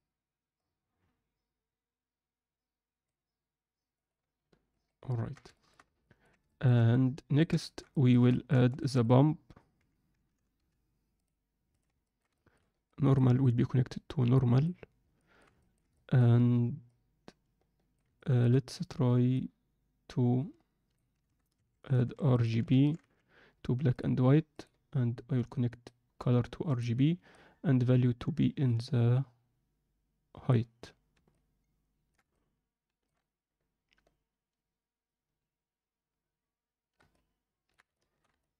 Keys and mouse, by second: 4.8 ctrl+alt+middle click, 5.1 ctrl+alt+middle drag, 5.5 alt+shift+click, 6.1 ctrl+alt+click, 6.5 ctrl+alt+click, 7.0 ctrl+alt+click, 7.5 alt+shift+click, 8.0 ctrl+alt+middle click, 8.4 shift+middle drag, 12.1 ctrl+alt+middle click, 12.3 shift+middle click, 12.8 click, 14.0-14.6 drag, 15.2 alt+shift+middle click, 15.7 ctrl+alt+middle click, 16.0 alt+shift+middle click, 16.9-18.0 drag, 18.2 alt+shift+middle click, 19.3 click, 19.6 click, 25.8-26.8 drag, 27.5-30.5 drag, 31.3-32.1 ctrl+alt+middle drag, 32.4-36.4 alt+shift+middle drag, 37.1-37.7 ctrl+alt+middle drag, 38.0 alt+shift+middle click, 38.4-38.5 ctrl+alt+middle drag.